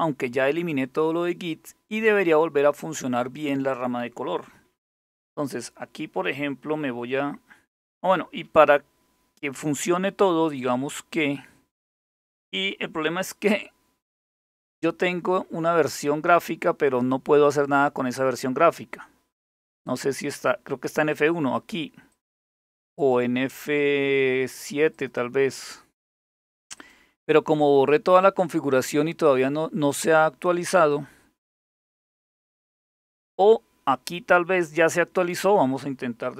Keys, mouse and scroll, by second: 17.8 click, 19.5 click, 20.8-22.0 drag, 22.6 click, 24.6 click, 26.4 click, 30.4 click, 35.1 click.